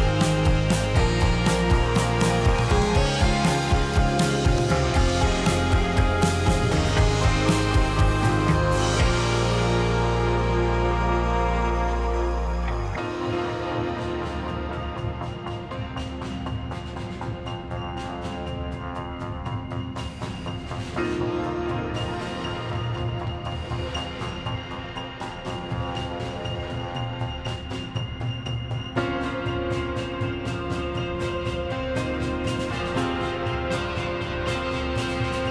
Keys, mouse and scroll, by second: 3.4 click, 5.2 s, 6.1 click, 7.8 s, 8.7 click, 9.4 s, 10.6 click, 11.0 s, 12.1 click, 12.6 s, 13.6 click, 14.1 s, 14.9 click, 15.6 s, 23.7 ctrl+r, 24.4-25.8 middle drag, 25.8 click, 26.2 click, 26.6 click, 27.4 g, 29.5 click, 31.0 click, 31.6 g, 32.5 click, 32.7 click, 33.6 g, 34.5 click.